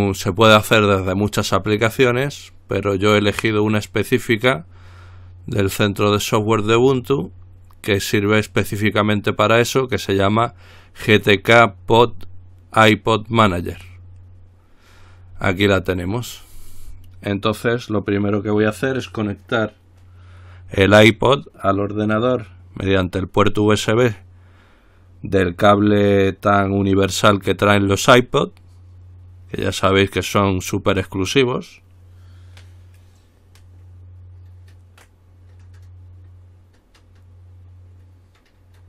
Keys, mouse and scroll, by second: 0.2 click, 13.7 click.